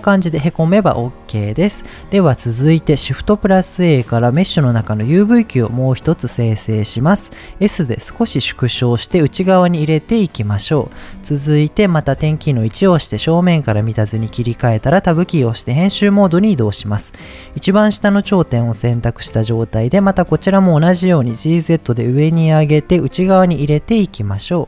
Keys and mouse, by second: 1.1 middle click, 1.5 Tab, 3.2 shift+a, 7.4 s, 10.2 click, 12.1 KP_1, 14.3 Tab, 19.8 g, 20.0 z, 22.8 click, 23.6 Tab, 24.3-24.6 middle drag.